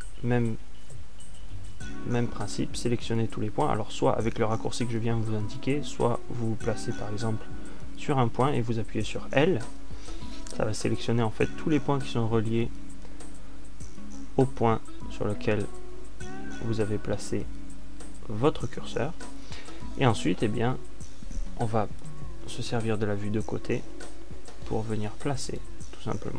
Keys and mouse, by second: 8.1 middle click, 10.5 l, 20.2-21.9 middle drag.